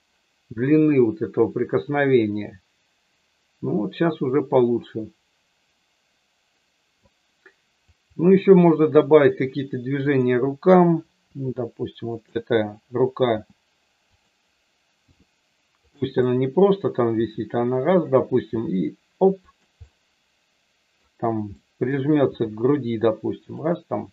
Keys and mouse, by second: 7.8 click, 10.0 click, 11.3 r, 13.3 g, 14.1 click, 15.0 r, 15.7 click, 16.3 middle click, 17.1 r, 17.9 click, 18.4 g, 19.4 click, 19.9-21.0 middle drag, 21.5 middle click, 22.3 r, 23.4 click.